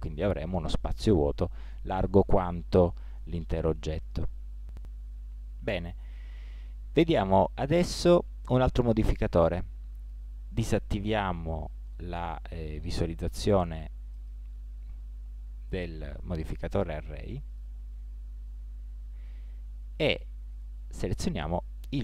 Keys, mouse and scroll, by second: 14.2-15.9 drag, 17.5 click, 18.2-19.3 middle drag, 20.5 middle click, 20.5-22.0 drag.